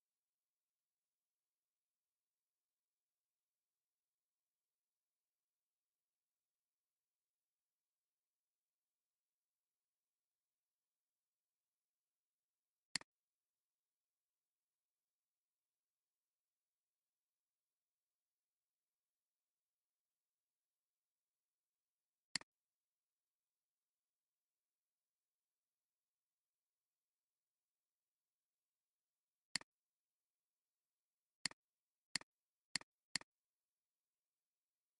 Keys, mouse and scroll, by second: 12.8 click, 27.4 click, 28.7 click, 33.0 double click.